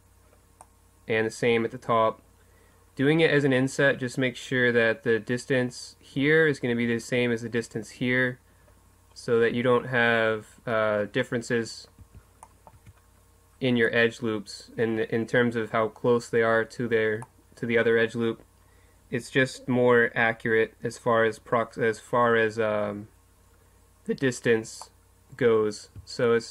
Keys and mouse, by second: 2.6-4.2 middle drag, 4.3-8.8 middle drag, 8.9 middle click, 12.0 a, 12.7 Tab, 17.3-19.2 middle drag, 22.6-26.5 middle drag.